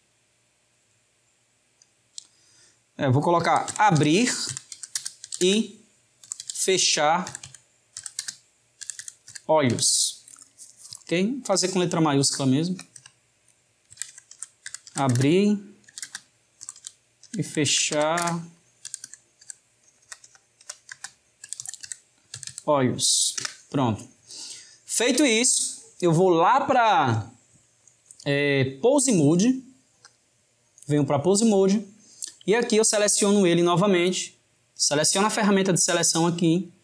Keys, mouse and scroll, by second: 20.0 BackSpace, 30.0-32.9 drag, 35.3-36.8 drag.